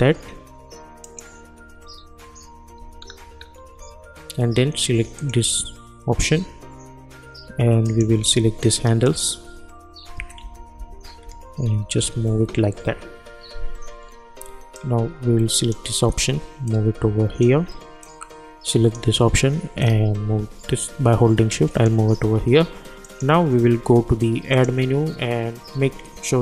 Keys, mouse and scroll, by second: 3.0-3.8 alt+scroll up 1, 5.2 click, 7.8 click, 9.0 shift+click, 10.2 Left, 12.0 Right, 14.7-23.0 drag.